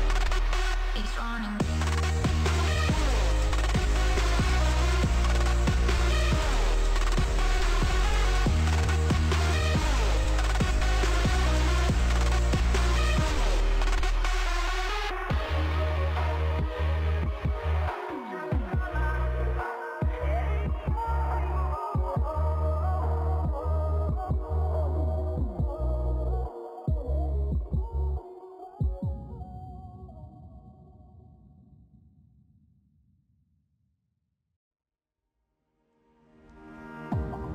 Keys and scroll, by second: 11.9 space, 20.8 Down, 22.7 ctrl+s, 23.3 Down, 24.7 Right, 27.2 alt+[, 27.9 ctrl+s, 28.5 space.